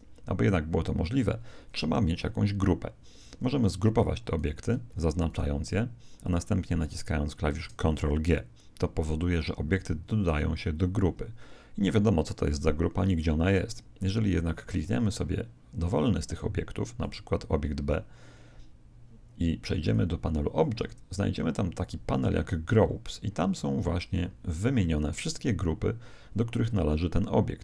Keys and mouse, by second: 4.2-8.7 right drag, 10.0 ctrl+g, 16.2-18.8 right drag, 19.8 click.